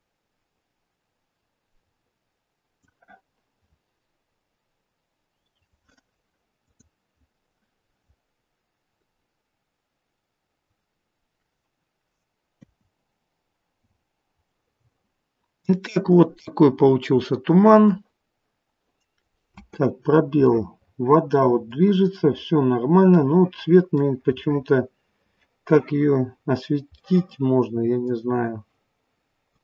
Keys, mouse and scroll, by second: 6.9 click, 9.2-9.6 scroll up 2, 12.6 KP_0, 13.8 scroll up 1, 14.4 scroll up 4, 14.7 middle click, 19.7 space, 20.4 middle click, 22.7 scroll down 2, 23.1 middle click, 26.5 scroll down 4, 27.0 middle click, 28.2 scroll down 2, 29.4 click.